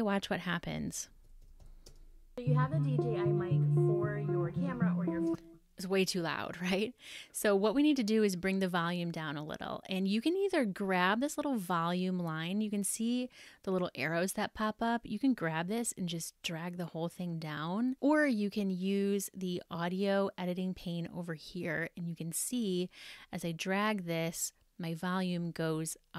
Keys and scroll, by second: 1.7 space, 5.1 space.